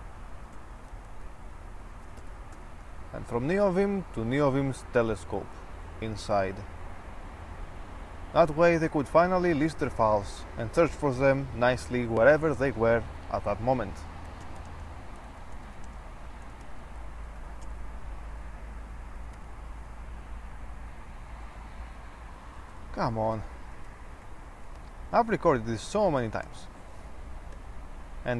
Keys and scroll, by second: 0.7-3.3 typing, 14.2-18.5 typing, 19.5 typing, 22.5-27.6 typing.